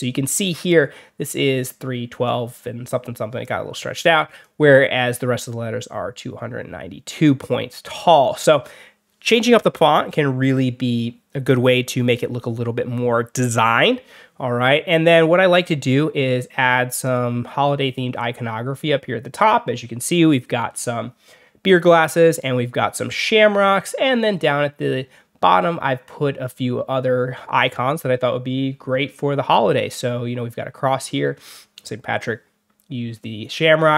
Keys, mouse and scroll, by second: 3.3 click, 15.7 click, 16.9 click, 24.2 scroll down 2, 28.8 alt+scroll up 2, 29.1 alt+scroll down 2, 30.0 alt+scroll up 2.